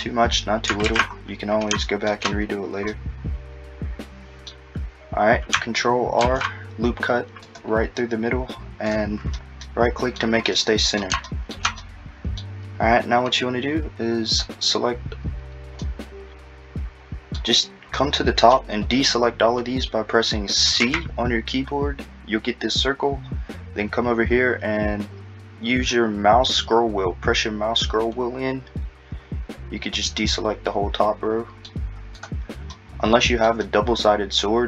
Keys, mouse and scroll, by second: 0.9 alt+z, 2.9 middle click, 9.6 middle click, 10.5-11.3 scroll, 11.8 middle click, 14.3 click, 15.8 middle click, 17.6-18.0 scroll, 18.0 middle click, 20.8 c, 32.7 middle click, 33.6 middle click.